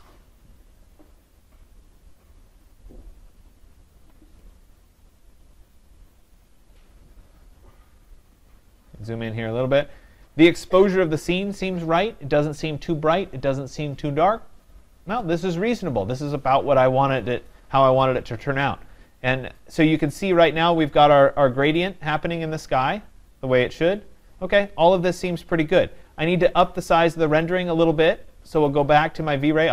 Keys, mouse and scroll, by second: 8.2-13.7 middle drag, 8.2-9.5 scroll, 18.6-19.7 scroll, 19.7-20.0 scroll, 20.5-22.5 scroll, 23.8-24.1 scroll, 25.9-27.5 scroll, 28.7 click.